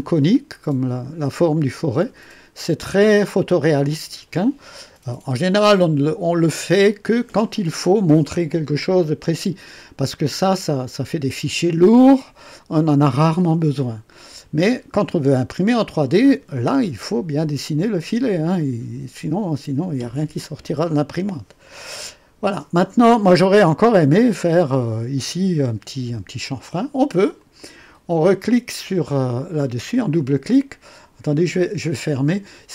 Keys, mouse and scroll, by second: 4.3-5.5 drag, 27.3 click, 31.5 click.